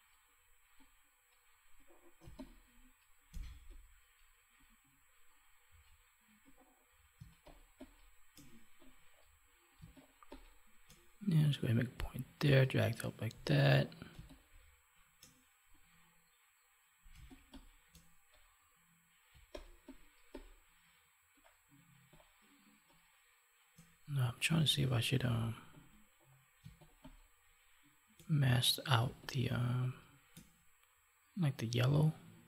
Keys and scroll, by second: 2.1 space, 7.1 space, 9.7 space, 14.2 space, 17.1 space, 19.2 space, 26.5 space.